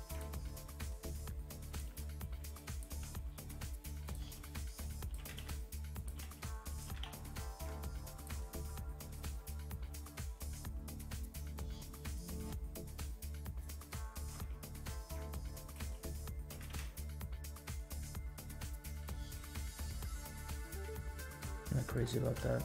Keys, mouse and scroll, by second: 0.5 click, 0.8 s, 1.9 g, 3.0 g, 4.3 r, 5.1 g, 6.1 g, 6.8 g, 9.0 click, 14.0 g, 15.8 s, 16.5 g, 19.4 s, 20.8 x, 21.9-22.3 drag.